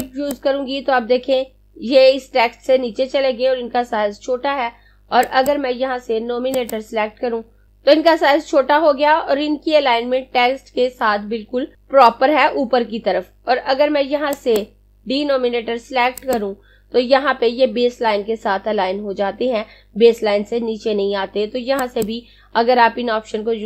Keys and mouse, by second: 5.1 click, 14.3 click, 21.5 click.